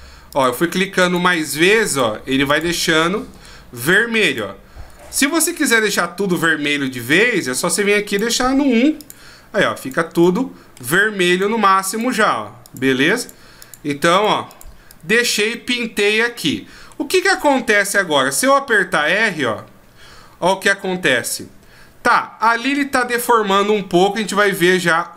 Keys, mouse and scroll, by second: 0.3 click, 1.0 click, 1.8 click, 2.5 click, 3.0 middle click, 3.8 click, 4.2 click, 5.0-6.0 shift+scroll down 11, 7.2 click, 9.0 click, 9.8 click, 10.2 middle click, 11.3 click, 11.9 click, 12.6 click, 13.2 click, 13.6 click, 14.1 click, 14.5 click, 14.9 click, 15.5 middle click, 17.1-18.1 scroll down 1, 18.1 scroll down 1, 18.2 r, 24.5 right click.